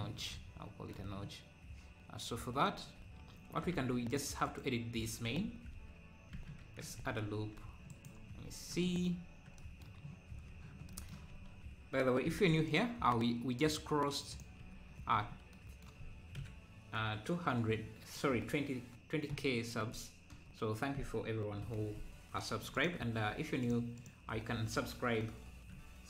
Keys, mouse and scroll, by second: 2.7 Tab, 3.4 `, 3.8 Tab, 4.1-5.4 drag, 5.4 Tab, 5.8 Tab, 6.6 Tab, 7.9 right click, 8.3 scroll down 1, 10.3 z, 10.9 z, 12.3 ctrl+r, 14.6 z, 15.1 z, 15.2 scroll up 1, 22.7 alt+click, 23.6-25.1 alt+drag.